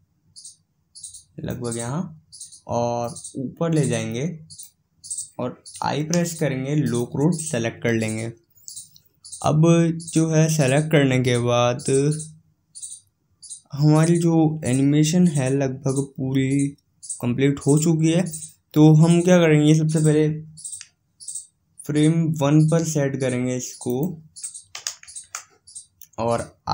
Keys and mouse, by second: 3.0-4.9 drag, 23.9-25.6 drag.